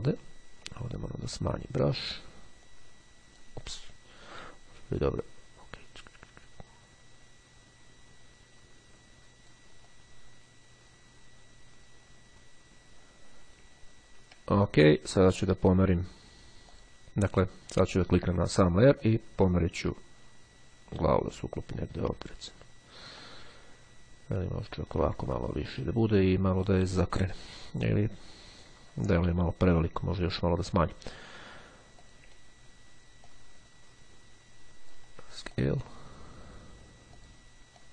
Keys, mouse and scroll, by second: 0.8 [, 2.8 click, 5.3-10.2 drag, 12.9-13.6 ctrl+scroll down 2, 13.8-14.4 ctrl+scroll down 3, 15.4 click, 16.8 click, 18.0 click, 19.1-22.4 drag, 22.4-22.9 ctrl+scroll up 2, 23.3-25.3 ctrl+drag, 25.3-25.8 ctrl+scroll up 2, 26.5-27.0 scroll down 2, 32.0 click, 33.1-35.5 ctrl+drag, 35.6 ctrl+click, 37.2-37.9 drag.